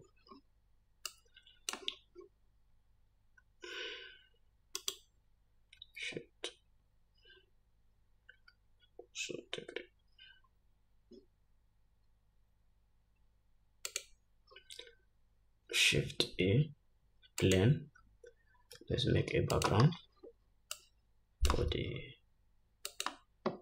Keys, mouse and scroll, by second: 1.5 click, 2.4-4.9 scroll down 2, 5.4 shift+right click, 6.1-20.1 shift+drag, 6.5 shift+s, 16.7 shift+a, 19.2 s, 20.4-21.2 scroll down 3, 21.2-23.5 drag, 22.1 s.